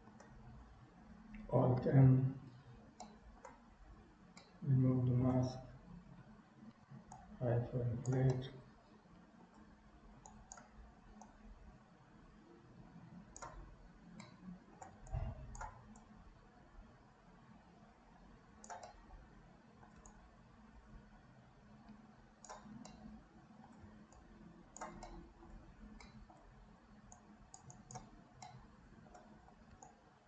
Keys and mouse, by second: 2.1 alt+m, 3.2 shift+middle click, 4.5 middle click, 7.2 click, 8.5-9.7 middle drag, 8.9 click, 8.9 right click, 10.3 right click, 11.3-13.4 right drag, 14.3 middle click, 15.2 shift+right click, 16.1-18.7 drag, 18.9-20.0 middle drag, 20.2-22.6 shift+drag, 22.8 middle click, 24.2 shift+click, 25.2 middle click, 26.2 middle click, 27.3 click, 27.9 click, 28.5 middle click, 29.9 shift+click.